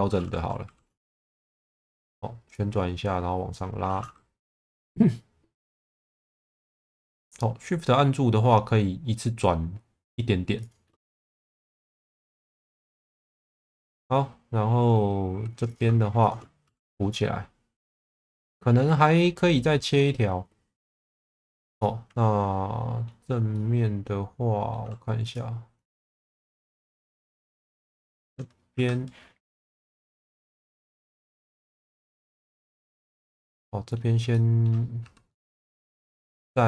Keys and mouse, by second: 0.6 r, 1.5 click, 2.6 click, 4.3 r, 10.6 shift+click, 11.3 click, 13.3 click, 13.8-15.1 middle drag, 15.3 2, 16.2 shift+click, 16.6 f, 17.0 middle click, 19.1 middle click, 20.7 2, 21.2 click, 21.8-23.0 middle drag, 23.5-24.7 middle drag, 25.2 click, 25.9 middle click, 26.5 shift+middle click, 27.1-28.3 middle drag, 28.7 1, 30.1 click, 30.9 shift+middle click, 31.4 middle click, 32.4-33.9 middle drag, 34.3 middle click, 35.0 2, 36.4 middle click.